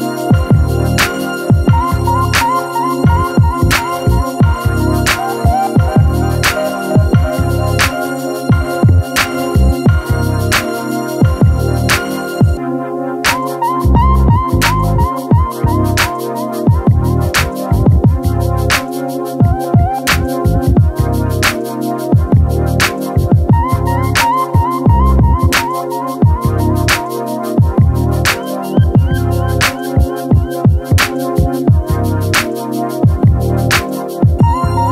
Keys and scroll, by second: 25.6-27.2 typing, 31.2 ctrl+t.